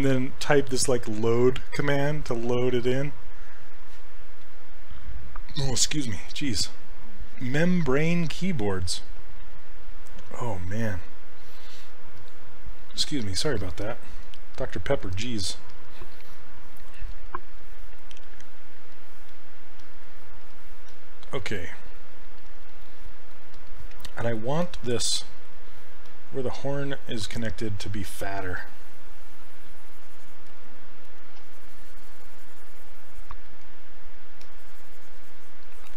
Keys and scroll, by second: 17.2 s, 25.2 s.